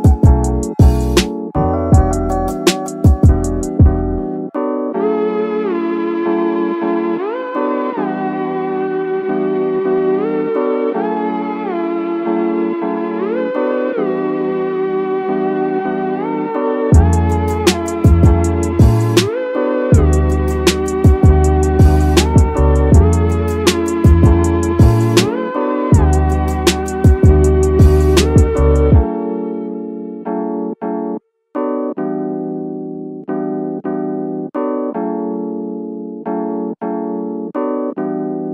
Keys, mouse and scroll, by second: 0.1 middle click, 0.7 scroll down 2, 0.8 middle click, 3.0 click, 10.4-12.7 drag, 11.5 KP_0, 13.3-13.8 scroll up 1, 13.8 shift+middle drag, 13.8 scroll up 3, 15.0 KP_3, 16.4-19.5 drag, 20.3 click, 21.8 middle drag, 22.1 scroll up 1, 22.4 middle drag, 22.4 scroll down 2, 23.1-24.3 drag, 25.1-27.7 drag, 28.6-30.8 drag, 29.6 KP_0, 31.4 scroll up 1, 31.6 scroll down 1, 36.0 scroll down 3, 37.8 scroll up 2.